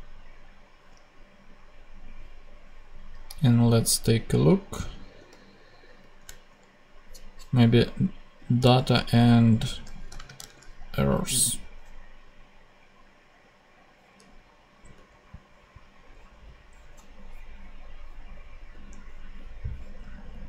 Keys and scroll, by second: 3.2 super+Tab, 5.9 shift+super+Tab, 8.6 super+c, 10.3 super+space, 14.8 super+Tab, 20.2 super+Tab.